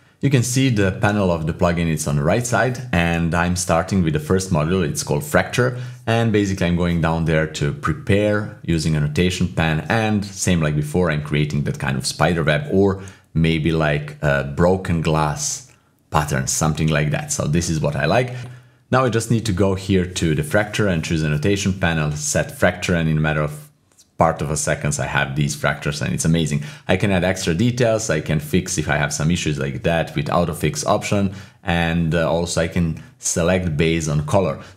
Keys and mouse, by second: 0.2 middle click, 0.8 shift+middle click, 1.2 click, 1.9 click, 2.0-3.4 typing, 5.7 click, 6.2 click, 6.2-7.1 typing, 9.8 click, 10.2 click, 10.6 click, 11.0 click, 11.3 click, 11.6 click, 11.9 click, 12.3 click, 12.8 click, 13.1 click, 13.5 shift+middle click, 13.8 click, 14.0 click, 15.2 click, 16.1 click, 16.8 click, 17.0 click, 20.0-22.7 drag, 23.2 typing, 24.8 click, 24.8 typing, 26.2-26.9 typing, 28.7 typing, 29.7-31.5 typing, 29.9 click, 30.2 click, 31.0 click, 31.6-34.7 drag, 32.9-33.6 typing.